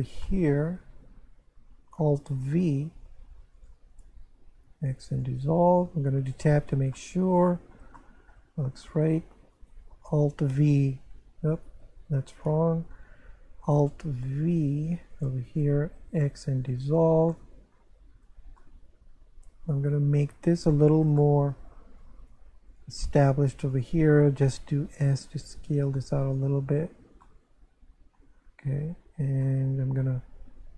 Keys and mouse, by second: 0.3 shift+middle click, 2.5 alt+v, 3.5 click, 3.9 shift+right click, 4.7 x, 5.1 click, 5.9 Tab, 6.9 middle click, 8.0 shift+middle click, 8.8 Tab, 9.5 right click, 10.6 alt+v, 11.5 right click, 12.7 ctrl+z, 14.4 alt+v, 15.1 click, 15.5 shift+right click, 16.3 x, 16.6 click, 17.3 middle click, 18.2 Tab, 18.6 middle click, 20.3 Tab, 20.7 shift+middle click, 22.0 right click, 22.7 click, 23.1 right click, 23.7 shift+right click, 24.8 s, 26.2 click, 26.7 Tab, 27.2 middle click, 28.8 Tab, 29.4 middle click.